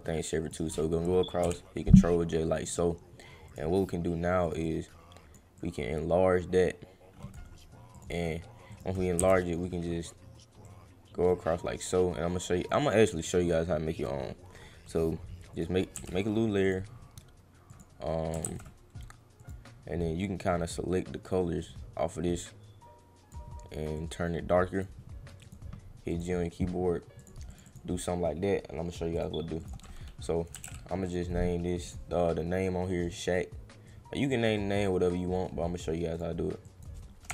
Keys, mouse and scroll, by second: 2.6 click, 3.5 click, 4.4 click, 4.6 click, 5.5-7.3 drag, 7.9 click, 8.7 click, 10.6-12.7 drag, 14.0 click, 15.5 click, 15.9 g, 16.6 click, 17.7 click, 19.4 click, 22.3 click, 24.0 click, 25.4 click, 26.1 click, 27.1 click, 27.5 click, 27.6 click, 29.1 click, 29.6 click, 30.5 s, 31.8 click, 33.0 click, 33.9 click, 34.5 click, 36.1 click, 36.6 click.